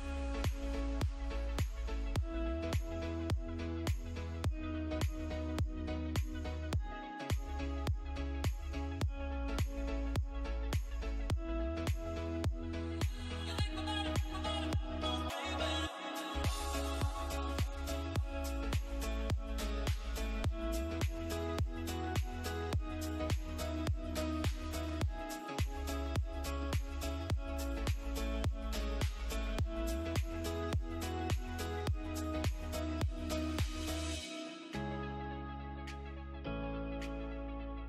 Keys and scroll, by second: 33.0 space, 33.6 F2, 35.0 g.